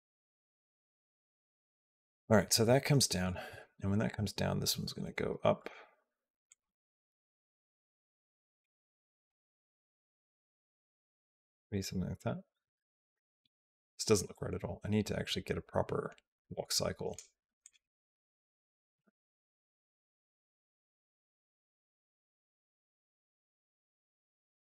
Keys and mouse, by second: 0.1 click, 1.3 Down, 5.4 r, 6.4 g, 9.1 g, 11.5 click, 12.1-17.0 drag, 17.4 click, 17.9 g, 19.2 g, 22.8 r, 24.1 g.